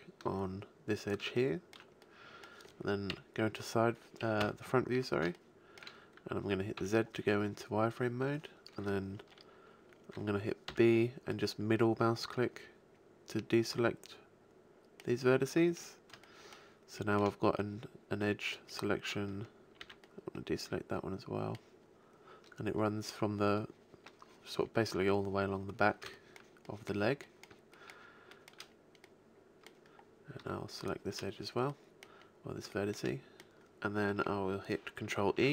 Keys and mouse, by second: 3.1 KP_3, 4.3 KP_1, 6.7 z, 10.6 b, 15.7-16.3 middle drag, 19.3-22.9 middle drag, 19.7 b, 26.0 middle click, 27.8-28.3 middle drag, 30.8-32.6 middle drag, 35.2 ctrl+e.